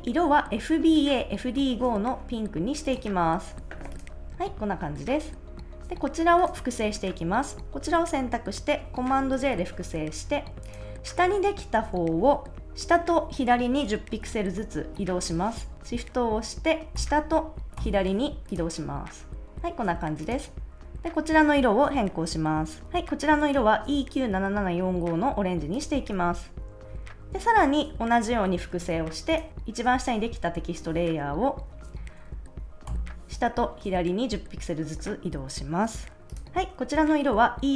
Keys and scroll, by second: 9.3 super+j, 15.7 super+z, 16.9 shift+Down, 17.7 shift+Left, 28.6 super+j, 31.9 shift+Down, 32.8 shift+Left.